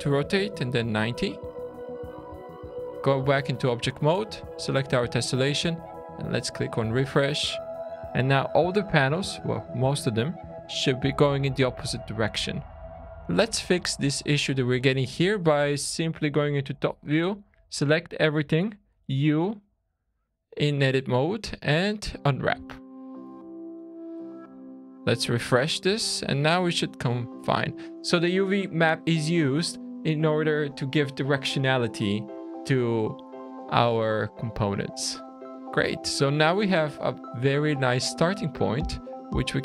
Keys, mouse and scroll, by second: 1.4 Tab, 1.8-2.2 scroll down 3, 2.4 shift+middle click, 3.2 middle click, 4.2 click, 5.5 click, 6.3-6.9 scroll up 4, 7.1 shift+middle click, 9.5 shift+scroll down 1, 10.1 scroll down 3, 10.6 middle click, 11.6 click, 12.8 Tab, 15.8 `, 16.9 a, 18.9 u, 22.7 scroll down 4, 23.3 Tab, 23.7 click, 24.4 q, 25.9 shift+middle click, 26.7-27.1 scroll up 5, 27.4 middle click, 27.7 scroll down 1, 34.6 middle click, 35.0 scroll down 1, 35.2-35.7 scroll up 5, 35.7-36.2 scroll down 2, 36.2 shift+middle click, 37.8 scroll up 2, 38.3 click, 38.8-39.6 scroll down 2.